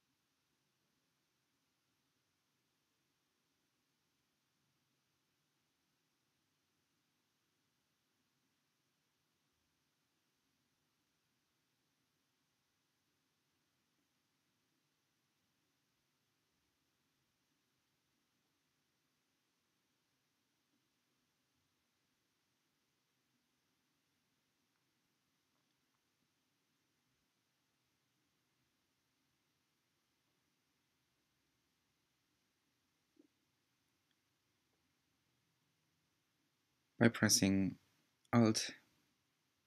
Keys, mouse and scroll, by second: 1.0 e, 4.9 r, 7.9 g, 10.0 e, 12.7 r, 14.1 g, 17.2 e, 21.2 r, 22.7 g, 29.2 e.